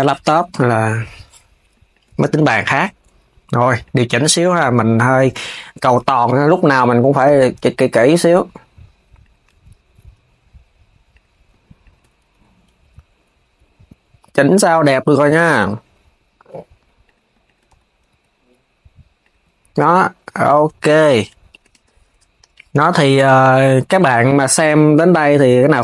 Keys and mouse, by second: 0.2 click, 1.6 shift+click, 1.8 KP_3, 2.4 g, 5.8 click, 6.5 s, 7.7 click, 8.9 click, 9.2 Tab, 10.8 click, 11.5 shift+click, 12.0 KP_3, 12.5 g, 15.0 click, 16.7 click, 17.1 shift+click, 17.4 KP_3, 17.8 g, 20.1 s, 20.5 click, 21.1 shift+click, 21.4 KP_3, 23.0 KP_3, 23.7 g.